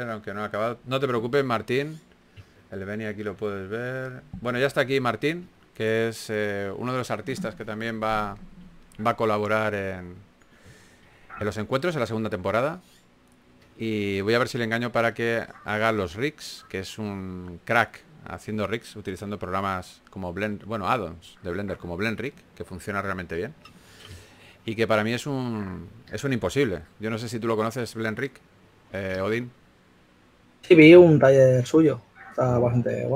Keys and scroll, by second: 2.2 s, 4.5-5.6 typing, 7.9 4, 10.0-11.3 typing, 12.5-14.3 typing, 15.6 typing, 17.1-18.6 typing, 31.5 typing.